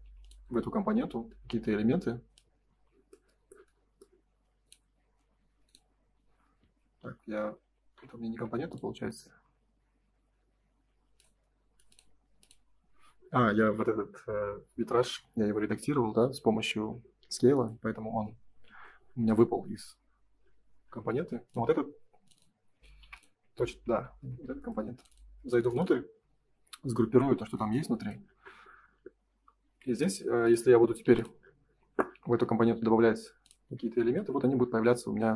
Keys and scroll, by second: 0.0 p, 2.5 space, 2.6 Escape, 6.6 ctrl+z, 8.4 Escape, 12.9 Escape, 18.6 ctrl+s, 23.8 Escape, 24.0 space, 24.2 Escape, 29.6 r, 33.5 space, 33.7 Escape.